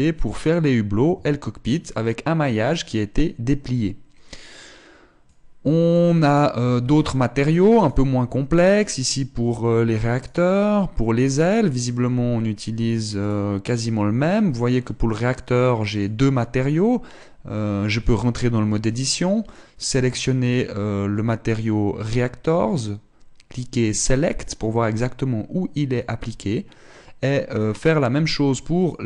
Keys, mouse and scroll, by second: 1.7 Tab, 6.0 click, 7.2 Tab, 8.3 right click, 10.8 right click, 13.7 right click, 16.9 click, 17.1-18.5 scroll up 2, 18.5 Tab, 24.6 click, 28.1 click.